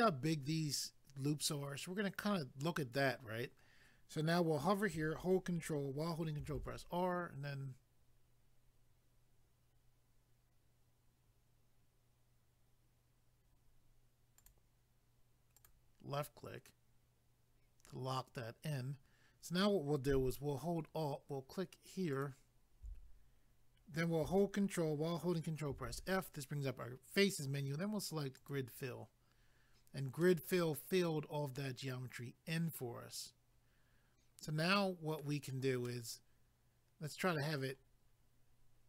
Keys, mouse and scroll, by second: 6.4 ctrl+r, 7.2-8.1 scroll up 1, 13.1-14.3 scroll up 1, 14.4 click, 14.5 click, 15.6 click, 15.7 click, 22.1 alt+click, 22.2 alt+click, 25.7 ctrl+f, 28.4 click, 28.5 click, 30.2 middle click, 35.8 middle click.